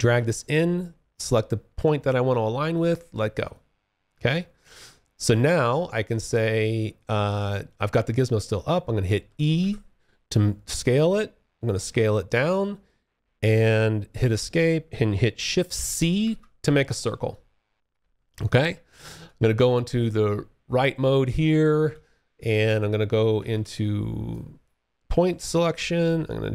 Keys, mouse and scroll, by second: 2.7 alt+click, 4.7 alt+middle click, 5.2 alt+click, 8.7 e, 9.9 click, 13.4 Escape, 15.4 shift+c, 16.4 alt+click, 17.9 space, 18.3 4, 19.1 space, 21.0 w, 23.4 click.